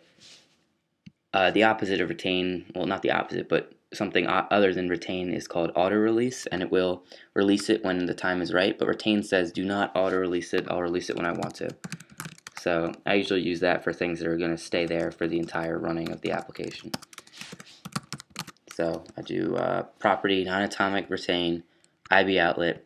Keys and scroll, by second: 11.4-12.4 typing, 14.5-19.8 typing, 21.0-21.8 typing.